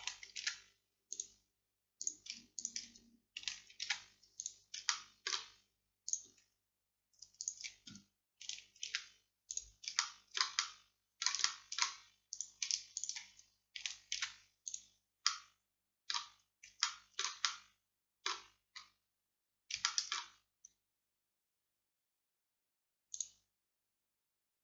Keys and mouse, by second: 0.5 alt+m, 3.9 alt+m, 9.0 alt+m, 10.0-12.2 drag, 14.2 alt+m, 19.9 middle click, 20.4 middle click, 20.6-23.2 middle drag, 23.2-24.6 drag.